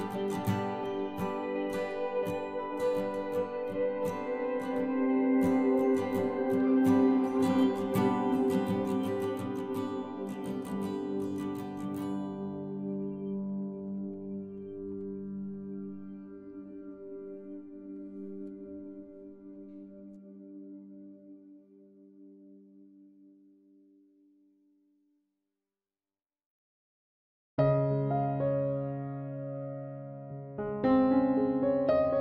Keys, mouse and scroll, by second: 0.6 i, 2.0 z, 2.3 middle click, 3.2-5.0 drag, 4.8 KP_3, 6.2 Tab, 6.7 ctrl+s, 8.2 z, 8.7-11.6 middle drag, 11.9 Tab, 14.2 ctrl+r, 14.9 right click, 15.2-17.0 drag, 17.0-19.0 right drag, 17.8 c, 20.5 click, 20.6-23.0 middle drag, 21.7 c, 23.1 right click, 23.5 KP_Decimal, 24.7 i, 25.4 z, 25.8 middle click, 26.9-28.7 drag, 27.5 c, 30.8-32.2 drag.